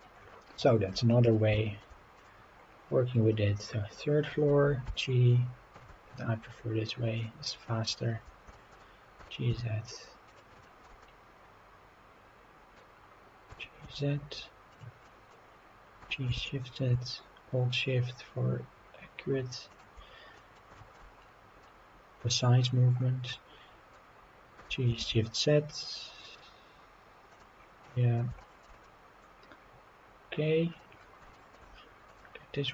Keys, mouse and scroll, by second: 0.1-0.5 scroll down 2, 0.6-0.9 shift+middle drag, 1.1 middle drag, 1.5 shift+middle drag, 2.2 click, 2.5 scroll up 2, 2.7 scroll down 2, 2.8-3.6 scroll up 4, 3.6-4.2 scroll down 4, 4.2 middle drag, 4.8 g, 5.7 shift+z, 7.1 click, 7.4-7.8 scroll up 4, 8.1-8.4 scroll down 2, 8.5 shift+middle drag, 9.2 g, 9.5 z, 10.3 click, 10.6 shift+middle drag, 11.0-12.8 middle drag, 12.9-13.3 scroll up 2, 13.5 g, 13.8 z, 14.7 click, 15.0 middle drag, 16.0 g, 16.3 shift+z, 19.7 shift+click, 20.1 scroll down 1, 20.3 middle drag, 20.8 shift+middle drag, 21.0-21.5 scroll up 4, 21.6-22.6 middle drag, 22.9-23.3 scroll up 2, 23.3-23.9 middle drag, 24.6 g, 25.0 shift+z, 27.3 click, 27.6 scroll down 2, 27.8-28.2 middle drag, 28.4 shift+middle drag, 28.8-30.8 middle drag, 31.0 scroll down 2, 31.3 shift+middle drag, 32.1 click.